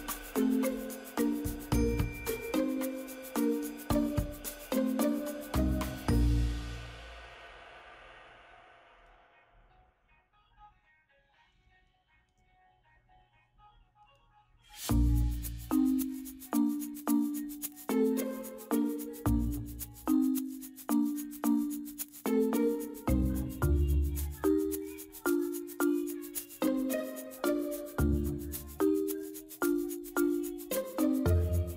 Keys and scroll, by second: 8.5 ctrl+z, 15.2 ctrl+j.